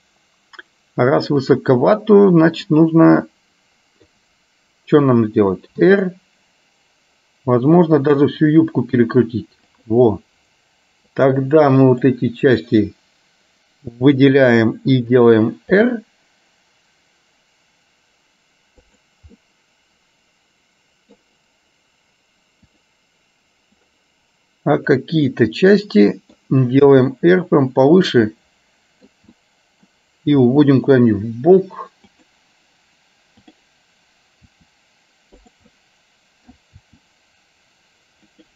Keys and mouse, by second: 1.5 click, 2.7 click, 3.3 middle click, 6.0 r, 11.4-13.4 drag, 16.7 r, 19.4-21.3 middle drag, 22.8 click, 24.9 click, 25.4-26.4 middle drag, 27.0 r, 28.3 middle click, 29.5 middle click, 30.5 r, 33.5 click, 34.5 r, 35.8 middle click, 37.0 r.